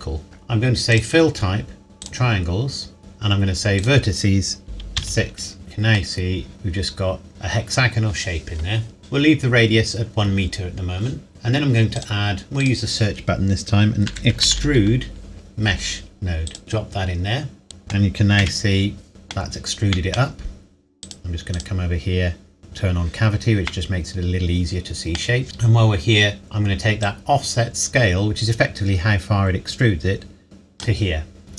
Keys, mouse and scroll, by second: 0.2-1.0 scroll up 1, 1.0 click, 3.0-3.8 scroll up 1, 3.8 click, 5.0 KP_6, 5.6 middle click, 9.0 scroll down 1, 11.3 middle click, 12.0 click, 14.1-14.5 typing, 16.5 click, 17.6 middle click, 18.4 z, 19.1-19.4 middle drag, 21.0 click, 23.7 middle click, 25.1 scroll up 1, 25.4-26.4 scroll down 1, 27.1 click.